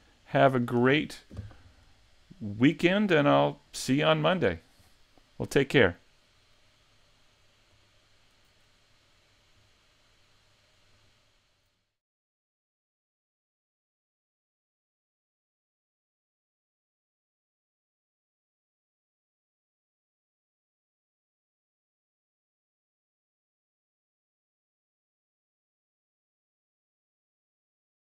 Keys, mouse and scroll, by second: 0.0 middle click, 0.0 shift+middle click.